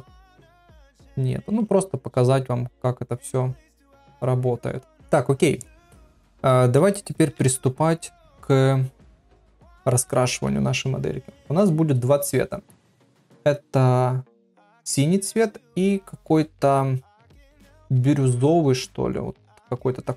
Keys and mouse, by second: 7.2 ctrl+Tab, 9.7 middle click, 10.1 middle click.